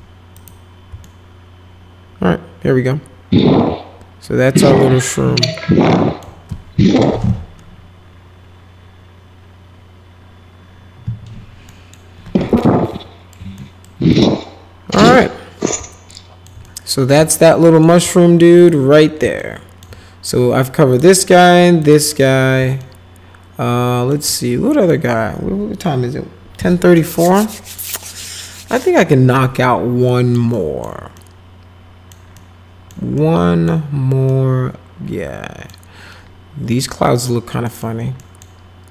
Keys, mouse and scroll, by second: 0.3 click, 1.0-6.2 alt+middle drag, 11.7 middle click, 12.6 alt+middle click, 13.6 middle click, 14.1 alt+middle click, 15.2-16.5 middle drag, 16.7-17.8 middle drag, 18.6 click, 19.4 alt+middle click, 20.9 click, 21.8 click, 22.8-24.1 alt+middle drag, 24.3 middle click, 30.1 middle click, 30.5 middle click, 31.1-32.1 middle drag, 32.4 middle click, 33.2 middle click, 34.3-35.7 middle drag, 37.7 middle click, 38.2 middle click.